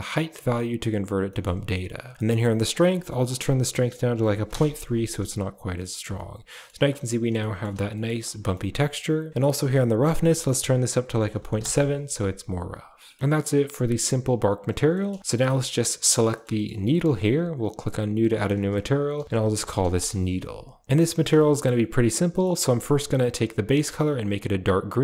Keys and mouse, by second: 1.2 middle click, 2.9-4.4 drag, 6.0-6.6 ctrl+middle drag, 7.4 shift+middle click, 7.8 ctrl+middle click, 8.4 middle click, 10.0-11.5 drag, 12.8 middle click, 14.9 middle click, 15.4 middle drag, 16.0 click, 16.2 middle click, 16.5 shift+middle click, 17.4 click, 18.3-19.9 drag, 19.2 e, 20.8 ctrl+v, 20.8 middle click, 21.4 shift+middle click, 22.2 middle click, 22.6 middle click, 23.5 click.